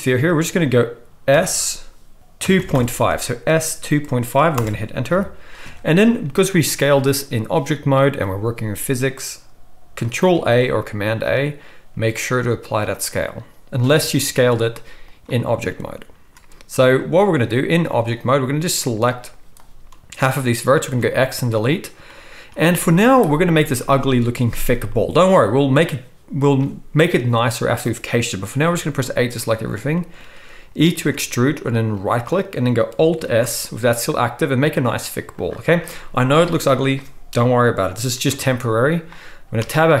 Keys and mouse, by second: 1.3 s, 5.1 KP_1, 8.1-15.2 right drag, 10.3 ctrl+a, 13.9 Tab, 14.2 s, 15.2-18.1 middle drag, 18.1-35.4 drag, 18.8 z, 20.8 x, 22.9 z, 28.7 a, 31.0 e, 33.2 alt+s, 35.4-40.0 middle drag, 39.6 Tab.